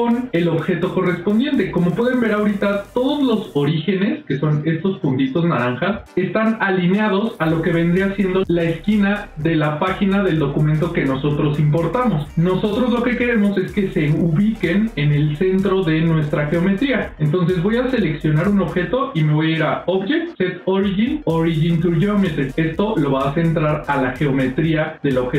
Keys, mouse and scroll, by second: 2.7 click, 3.7 click, 19.5-22.4 drag.